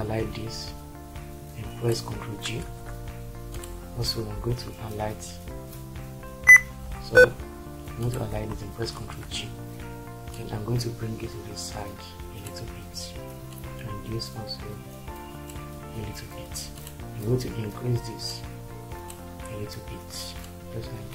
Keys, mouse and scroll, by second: 2.8 ctrl+g, 6.3 Caps_Lock, 9.0 ctrl+g.